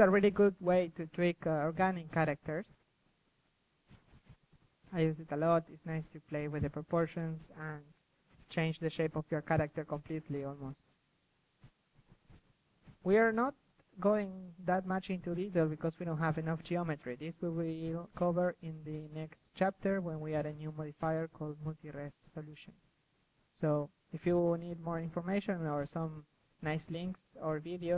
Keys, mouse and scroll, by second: 0.4 click, 0.6-2.4 middle drag, 2.4-4.4 drag, 4.1 KP_3, 4.6-5.6 drag, 5.7 drag, 6.2-7.1 middle drag, 7.1-7.7 drag, 7.7 middle drag, 8.0-8.4 drag, 8.2 KP_3, 9.4 KP_1, 10.3 KP_3, 11.5 KP_3, 11.9-12.5 drag, 12.6 KP_3, 13.1 s, 13.2-14.4 drag, 14.6 KP_3, 14.7 g, 16.2-20.1 drag, 17.4 s, 21.0-23.1 drag, 21.2 g, 23.1-26.4 middle drag, 26.4-27.8 drag, 26.4 KP_3, 27.9 click.